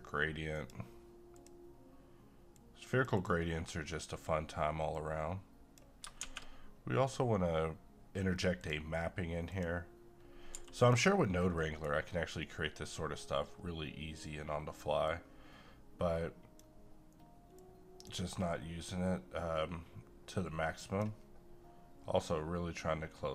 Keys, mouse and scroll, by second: 6.2 a, 8.6 click, 10.5 g, 10.8 click, 11.2-11.6 scroll up 1, 11.6 middle click, 11.9-13.1 scroll up 1, 15.1-20.3 drag, 20.3-23.3 drag.